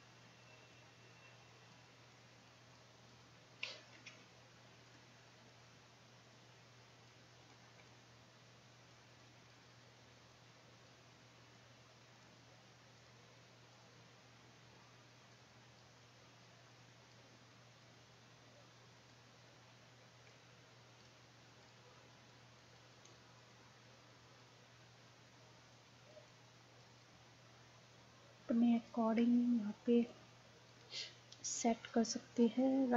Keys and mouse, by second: 4.0 ctrl+z, 4.9-7.3 drag, 7.9-19.7 drag, 20.3-28.6 drag, 28.8-32.9 drag.